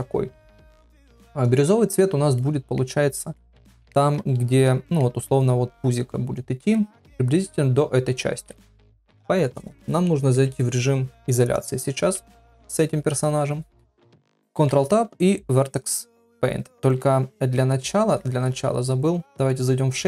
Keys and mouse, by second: 0.6 KP_1, 3.5 ctrl+middle click, 4.7 middle click, 6.8 middle click, 10.3 KP_Divide, 12.0 KP_1, 14.5 ctrl+Tab.